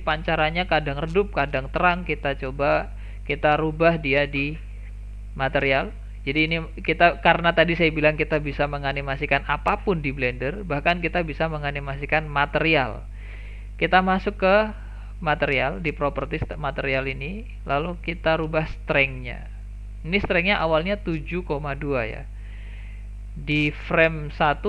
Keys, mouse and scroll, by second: 5.1 click, 15.4 click.